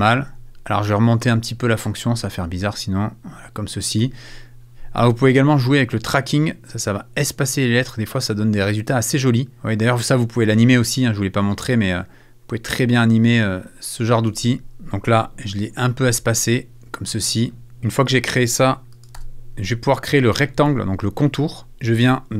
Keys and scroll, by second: 4.8 super+z, 19.2 super+f.